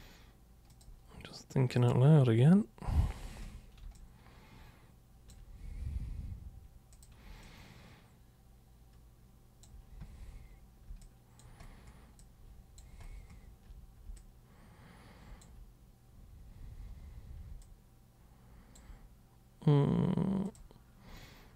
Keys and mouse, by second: 0.7 super+click, 1.8 super+click, 3.3 ctrl+super+1, 4.1-5.3 alt+super+drag, 6.9 super+click, 7.4-9.6 alt+super+drag, 11.0 alt+super+click, 12.2 alt+super+click, 14.1-15.4 alt+super+drag, 17.7-18.8 alt+super+drag, 20.4 super+click.